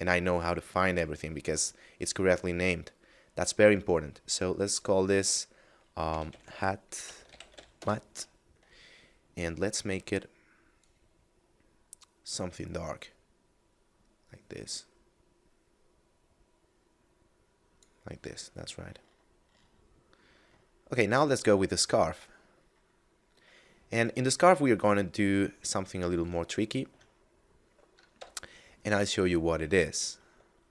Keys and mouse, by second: 6.0-7.5 typing, 7.7 Return, 9.4 click, 18.3 middle click, 20.8 middle click, 23.9 right click, 24.9 middle click, 26.5 shift+middle click, 27.1 middle click, 27.9 KP_Divide, 30.5 shift+middle click.